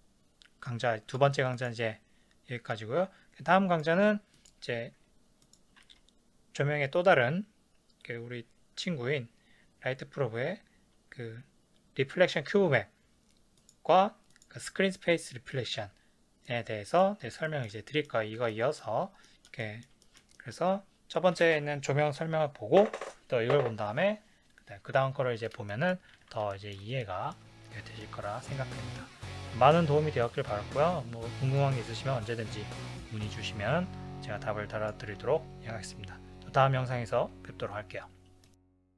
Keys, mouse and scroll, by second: 4.3 click, 5.4 click, 5.8 shift+a, 13.6 click, 14.3 click, 16.4-24.4 middle drag, 25.7 middle click, 26.2 ctrl+s, 26.5 shift+middle click, 28.2 middle click, 35.0-37.0 middle drag.